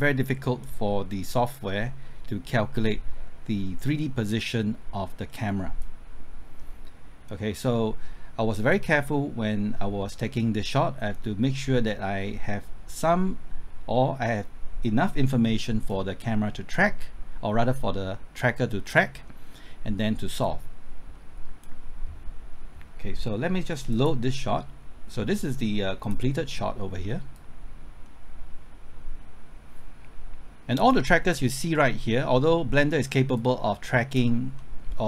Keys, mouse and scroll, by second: 34.5 middle click.